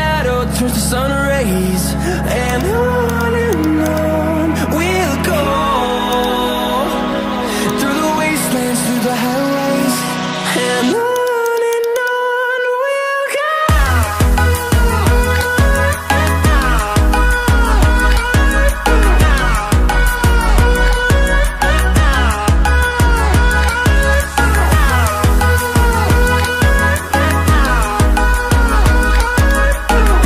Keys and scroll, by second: 16.5 ctrl+d.